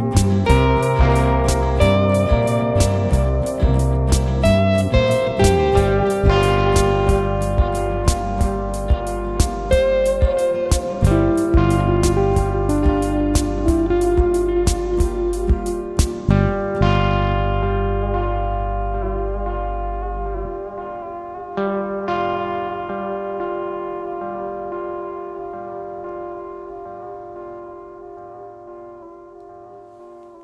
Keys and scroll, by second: 10.1 ctrl+s.